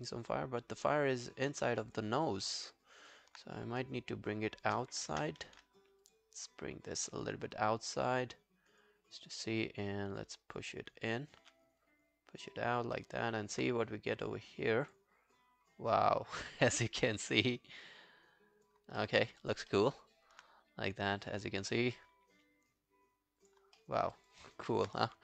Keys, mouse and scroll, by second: 0.0 alt+click, 1.3 alt+middle click, 1.5 alt+right click, 1.7 alt+click, 2.4 alt+right click, 2.7 alt+click, 5.5 ctrl+z, 11.4 r, 13.0 alt+middle click, 13.2 alt+right click, 19.1 alt+middle click, 19.2 alt+right click, 19.5 alt+click, 19.7 alt+middle click, 19.9 alt+right click, 23.8 alt+middle click, 24.2 alt+click, 24.4 alt+right click, 24.7 alt+middle click.